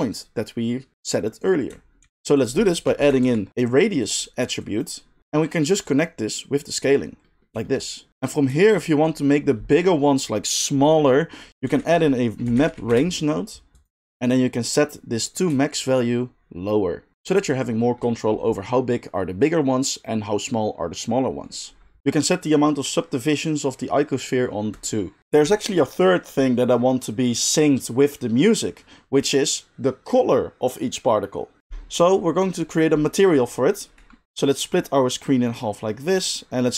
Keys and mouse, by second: 2.0 shift+a, 4.1-4.6 middle drag, 4.6-8.3 drag, 11.6 shift+a, 12.9 click, 13.9-15.8 middle drag, 15.8-36.7 shift+drag.